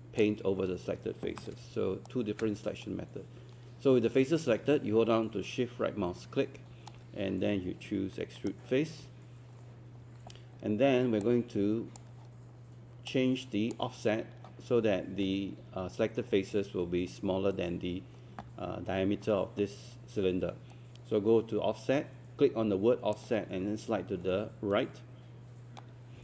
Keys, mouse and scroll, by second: 2.1-8.6 shift+right drag, 11.3-26.2 drag.